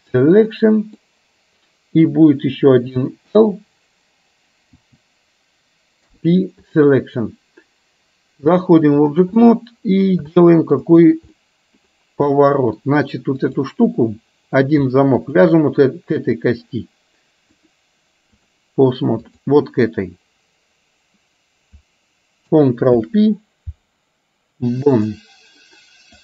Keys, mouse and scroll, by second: 0.6 middle click, 3.4 l, 5.7 l, 6.0 p, 8.5 click, 9.5-10.1 middle drag, 10.5 shift+middle click, 11.5 middle click, 12.4 middle click, 13.4 click, 15.3 shift+click, 17.6-18.6 drag, 23.0 ctrl+p.